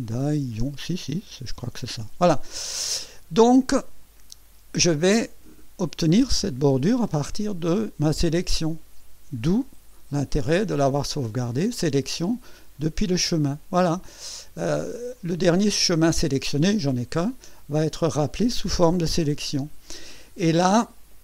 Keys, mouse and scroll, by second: 1.0-2.1 typing, 11.1 click, 12.7 click, 15.1 click, 17.8 click.